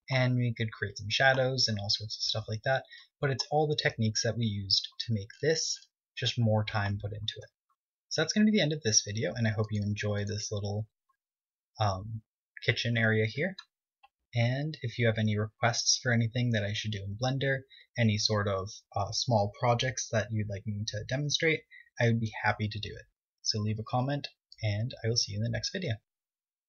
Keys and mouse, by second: 0.1 right click, 4.4 middle click, 7.5-9.9 middle drag, 10.8 click, 14.7-22.9 middle drag.